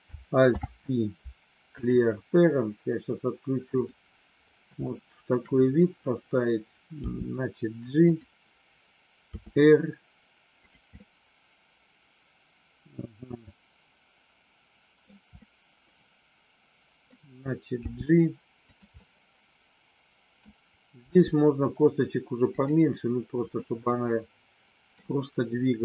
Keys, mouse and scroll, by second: 0.5 alt+p, 4.9 shift+middle click, 7.1 g, 8.0 click, 9.2 r, 10.6 click, 11.0-15.1 middle drag, 15.3-17.1 middle drag, 17.9 g, 19.1-20.5 middle drag, 21.1 g, 22.5 click, 23.6-25.0 middle drag.